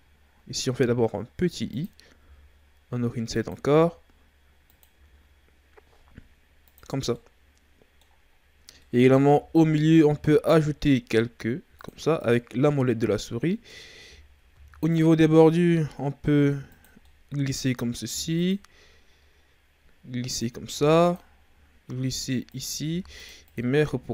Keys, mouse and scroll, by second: 2.2 i, 3.7 i, 4.9 i, 7.0 scroll down 1, 7.1-8.3 middle drag, 8.3-8.8 scroll up 2, 8.8-10.0 middle drag, 10.0 ctrl+r, 13.5-14.5 middle drag, 14.5 ctrl+r, 17.0-18.1 middle drag, 18.1 ctrl+r, 20.7 ctrl+r, 22.8 ctrl+r, 23.7 Tab.